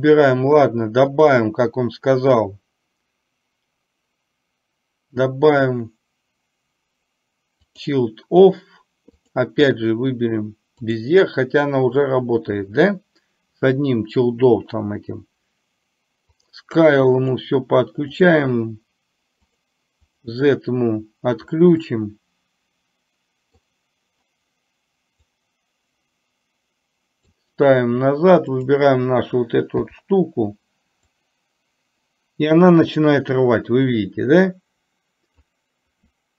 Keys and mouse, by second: 1.3-8.0 drag, 9.3-11.0 drag, 16.4 drag, 17.2 click, 18.2 click, 20.2 click, 21.9-23.7 middle drag, 25.5-27.5 drag, 28.7 click, 31.3-35.5 drag.